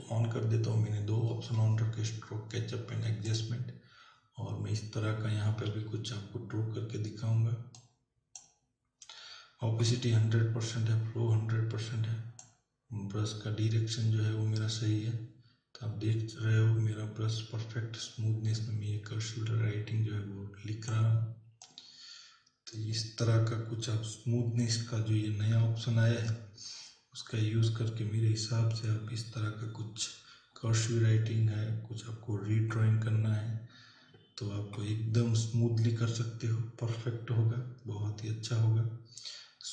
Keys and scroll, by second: 5.7 ].